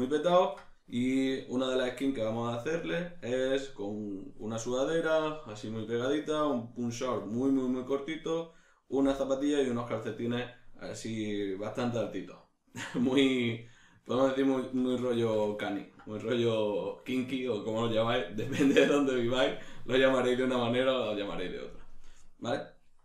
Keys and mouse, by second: 13.4 ctrl+middle click.